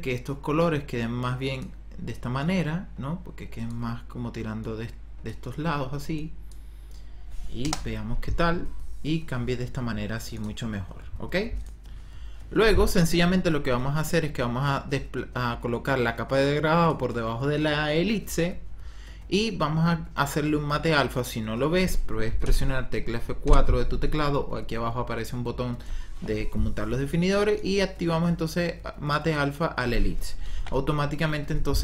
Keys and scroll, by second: 7.5 KP_0, 22.4 F4, 23.4 F4.